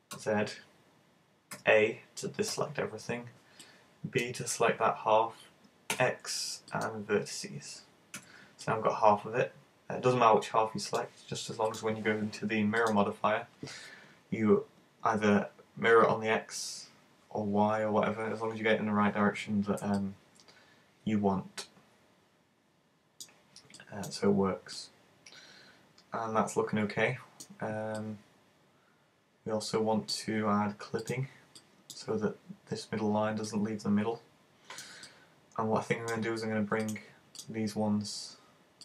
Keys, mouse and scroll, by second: 0.1 z, 8.6 middle click, 11.7 click, 20.1 middle click, 23.8 middle click, 24.2-24.8 scroll up 3, 24.8 middle click, 28.0 middle click, 31.1 click, 31.6 middle click, 33.5 middle click, 36.9 right click, 37.4 shift+right click.